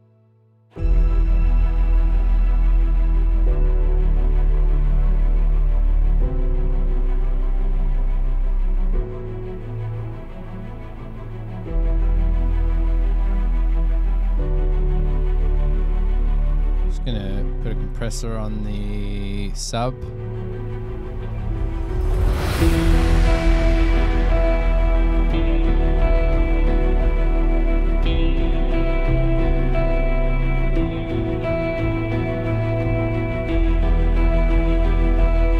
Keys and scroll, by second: 5.7 super+=, 7.8 super+=.